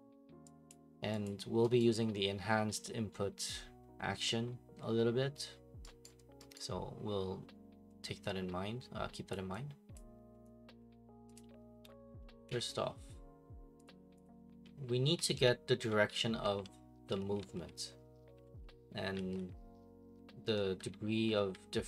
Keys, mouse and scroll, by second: 0.7 click, 1.2 click, 1.8 right click, 3.1 middle click, 3.1 middle click, 3.2 middle click, 4.1 middle click, 6.0 right click, 6.5 right click, 9.3 right click, 9.9 right click, 11.3 click, 12.4 Escape, 13.8 click, 14.2 click, 14.7-21.8 typing.